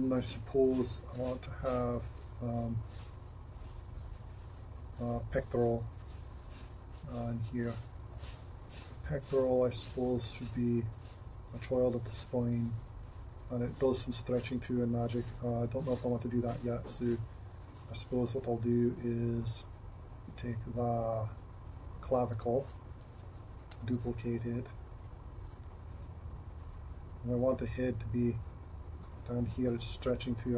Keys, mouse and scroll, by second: 22.4 Tab, 23.8 shift+d, 25.7 r.